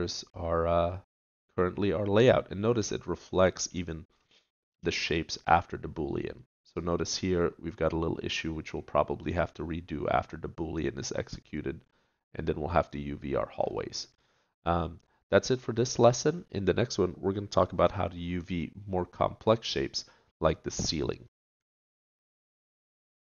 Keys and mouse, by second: 0.3-3.0 middle drag, 6.5 middle click, 13.0 middle click, 13.5-17.8 middle drag, 19.0 click, 19.0-20.9 middle drag, 19.0 right click.